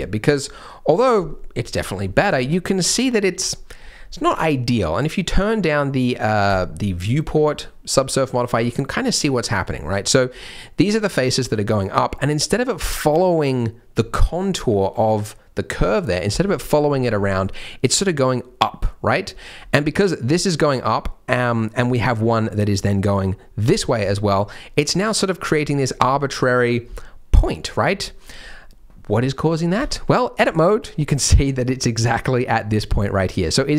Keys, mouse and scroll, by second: 2.2 scroll up 1, 2.5 middle click, 3.5 middle click, 6.4 click, 7.6 middle click, 8.4-9.0 scroll down 2, 9.0 middle click, 9.7 scroll up 1, 9.8 middle click, 17.2 middle click, 19.0 scroll down 2, 19.3 middle click, 19.6-20.2 scroll up 2, 24.0-27.0 scroll up 1, 28.3-28.7 scroll up 1, 28.7-29.7 scroll down 1, 29.7 Tab, 30.4 click, 30.7 scroll up 1, 30.7 middle click, 31.6 scroll down 2, 31.9 middle click, 32.6 click, 33.0 middle click, 33.4 scroll up 2.